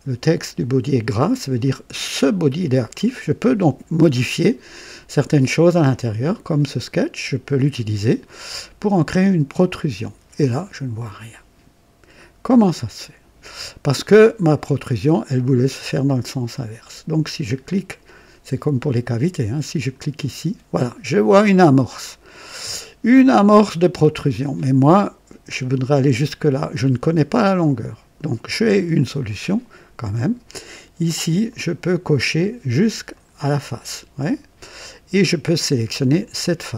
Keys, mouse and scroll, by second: 9.5 click, 19.7 click, 21.4-24.4 drag, 31.4 click, 33.1 click, 36.0 click.